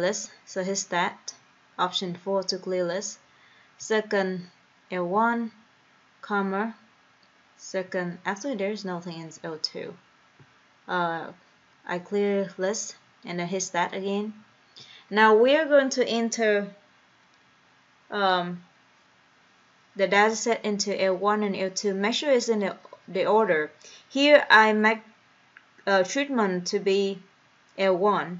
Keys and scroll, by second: 2.1 4, 5.4 1, 6.7 ,, 9.6 2, 11.9 Return, 15.0 1.